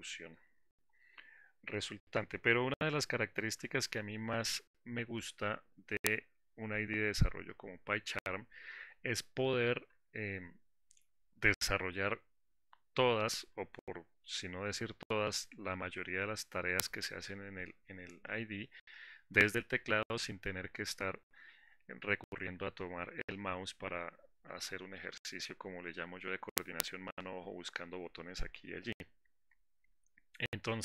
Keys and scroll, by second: 4.3 alt+4.